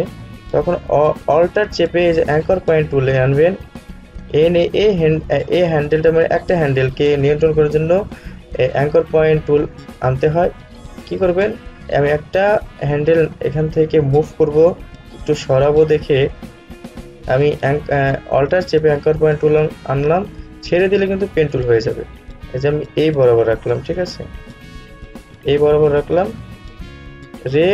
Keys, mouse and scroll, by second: 5.9-15.9 alt+drag.